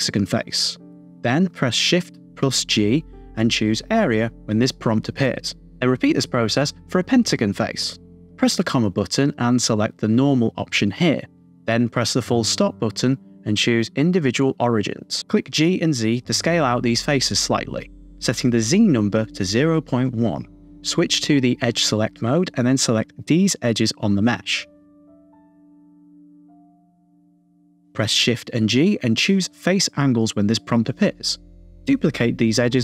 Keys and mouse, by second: 0.0 middle click, 0.0 KP_2, 3.9 shift+g, 5.9 shift+click, 7.0 shift+g, 15.4 g, 15.7 z, 17.7 click, 19.3-20.3 drag, 22.2 click, 24.3-25.6 shift+drag, 25.8 middle click, 26.7 shift+click, 26.9 middle click, 28.4 shift+g.